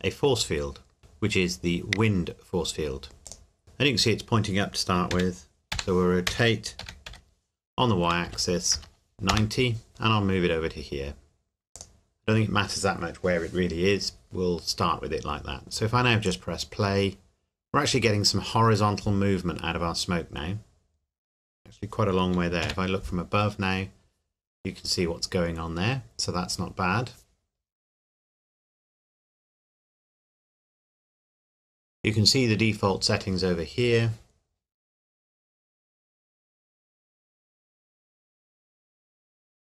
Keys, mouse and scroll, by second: 3.2 click, 5.1 r, 5.7 y, 6.3 Escape, 6.8 r, 7.1 y, 8.3 KP_9, 8.7 KP_0, 9.3 KP_Enter, 9.9 g, 11.7 click, 16.2 click, 22.6 KP_7.